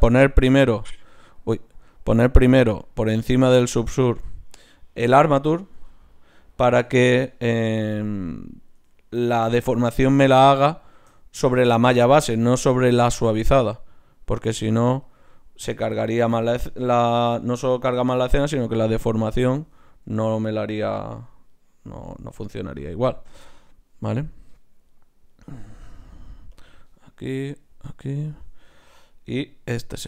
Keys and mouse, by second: 1.2-5.8 drag, 1.8-5.8 right drag, 5.8 h, 6.5-10.4 right drag, 10.7-14.5 middle drag, 14.5-16.8 drag, 16.2 h, 19.3 click, 20.1 h, 23.5-30.0 drag, 24.9-27.0 right drag, 27.3-29.0 right drag, 29.1-30.0 right drag.